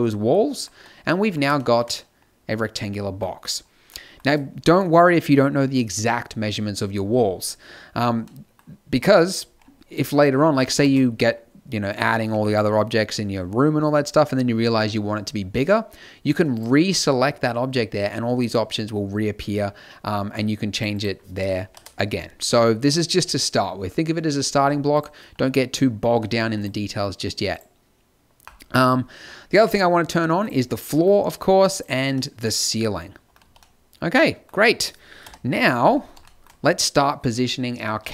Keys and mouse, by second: 7.8 middle click, 10.8 shift+a, 11.9 middle click, 12.2 g, 16.5-24.5 drag, 24.9-26.6 drag, 26.1 x, 30.7 middle click, 31.0-32.2 drag, 33.3 z, 35.1 KP_7, 35.5 KP_5, 37.9 shift+a.